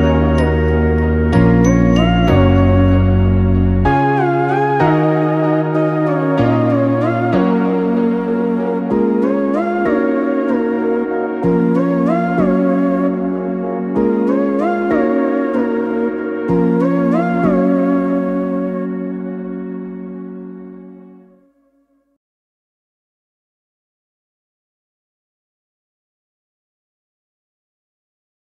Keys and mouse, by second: 5.9 ctrl+r, 11.5 ctrl+r, 14.1 click, 15.6 click, 16.6 shift+click, 17.6 j, 19.0 click, 19.7 shift+click, 20.8 j, 24.1 Tab, 25.3-27.2 ctrl+middle drag, 27.2 Tab, 28.3-28.4 ctrl+middle drag.